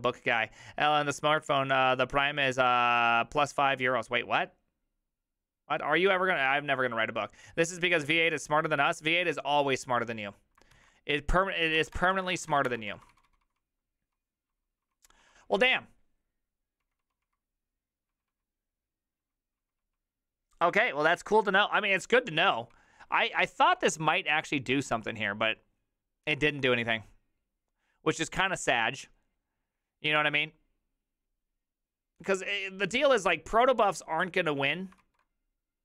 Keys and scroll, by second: 10.8 alt+{, 11.6-13.4 typing, 15.4-16.2 typing, 17.9-21.1 typing, 22.7-23.6 typing.